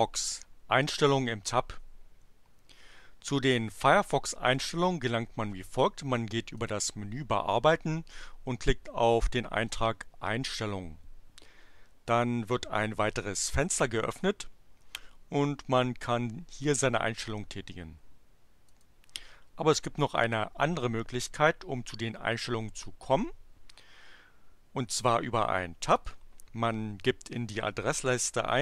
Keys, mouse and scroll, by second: 4.5 click, 6.4 click, 9.7 click, 18.7 click, 26.0 click, 28.0-28.6 typing.